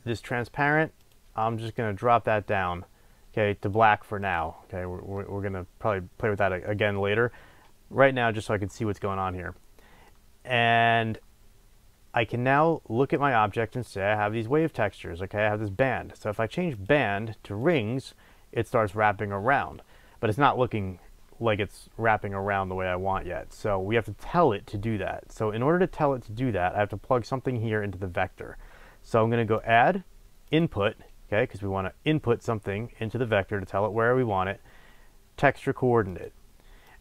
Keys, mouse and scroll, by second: 1.0 click, 4.2 drag, 10.0-16.7 middle drag, 11.4-12.4 scroll up 2, 12.4 scroll up 1, 13.4-16.7 scroll down 2, 16.7-37.0 drag.